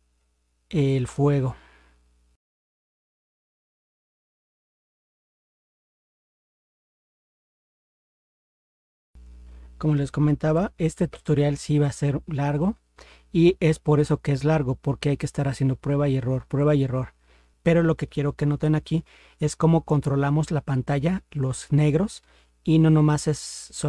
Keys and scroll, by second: 10.5 ctrl+0.